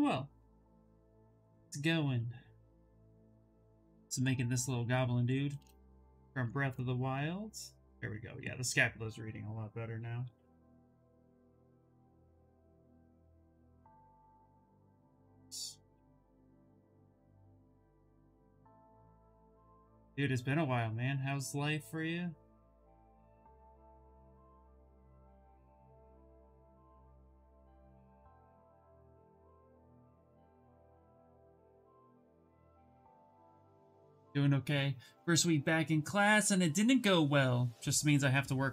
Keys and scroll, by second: 2.9 d, 4.3 shift+f, 8.9-10.9 typing, 13.3 s, 20.3 s, 32.4 b, 33.0 s.